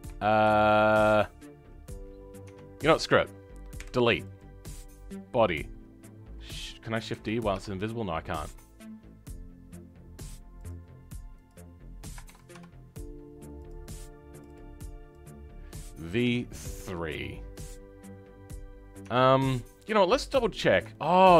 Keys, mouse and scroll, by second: 1.5-2.4 scroll down 10, 2.4 Tab, 4.3 Left, 11.4 click, 12.2 shift+d, 13.5 click, 17.6 scroll up 2, 19.0 Tab.